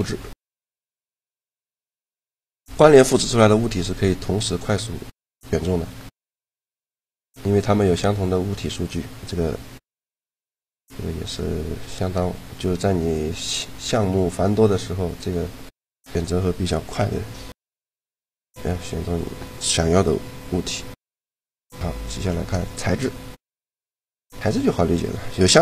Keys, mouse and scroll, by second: 1.2 Tab, 1.6 Tab, 3.4 shift+l, 6.7-10.2 middle drag, 10.6 a, 15.7-17.3 right drag, 16.6 shift+l, 20.3 a, 21.4 shift+l, 24.6-25.6 right drag.